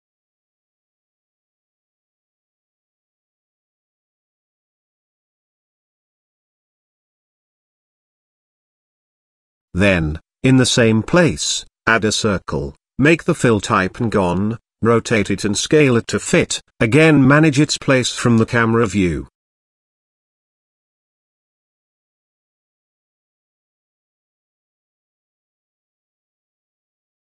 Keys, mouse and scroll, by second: 1.9 g, 4.1 middle click, 5.2 Tab, 5.6 shift+middle click, 7.6 click, 9.3 click, 10.1 shift+a, 13.3 z, 14.0 shift+a, 14.5 click, 16.0 z, 16.9 r, 18.7 s, 20.4 middle click, 21.4 g, 24.0-24.7 middle drag, 25.9 KP_0, 27.0 g.